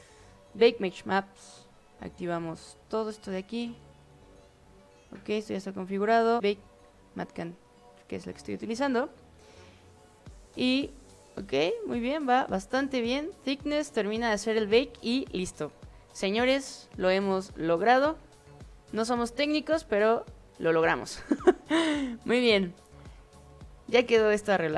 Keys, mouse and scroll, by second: 0.5 click, 2.3 click, 3.3 click, 4.0 click, 7.3 click, 24.6 click.